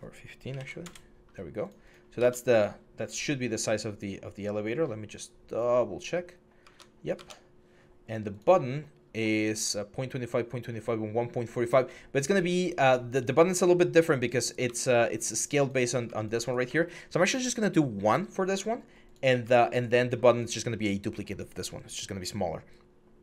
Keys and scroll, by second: 0.3 1, 0.3 5, 0.6 Return, 2.1 alt+Tab, 6.5 alt+Tab, 6.9 alt+Tab, 14.4 alt+Tab, 15.5 alt+Tab.